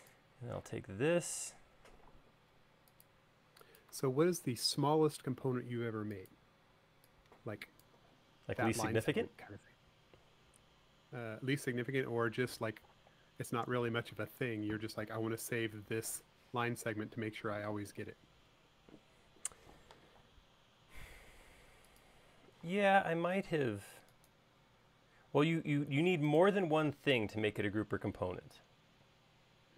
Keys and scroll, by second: 0.8 q, 6.9 e, 21.7 space, 22.8 m.